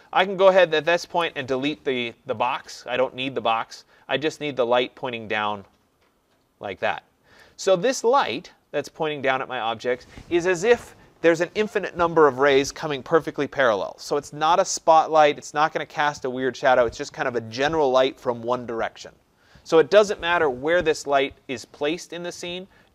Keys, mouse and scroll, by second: 1.1 Delete, 2.8-3.3 scroll, 3.7 right click, 4.1-4.4 scroll, 7.4 right click, 7.9 scroll.